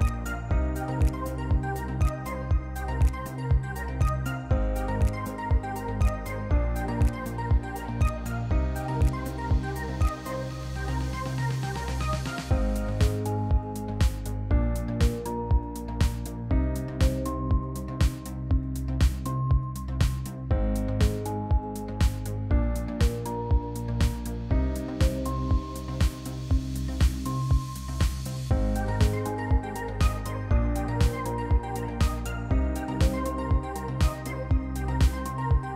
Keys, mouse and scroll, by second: 2.5 click, 6.5 click, 8.5 click, 8.7 click, 9.5 click, 9.9 click, 11.6 click, 12.7 click, 13.6 click, 14.7 click, 15.3 click, 15.3 click, 16.0 click, 16.1 click, 16.9 click, 17.0 Delete, 17.7 click, 17.8 Delete, 18.6 click, 19.6 click, 20.4 click, 21.3 click, 22.0 click, 24.3 click, 25.5 click, 26.4 click, 27.8 click, 29.1 F1, 29.7 click, 32.3 click, 33.6 click, 34.0 F1, 35.1 click.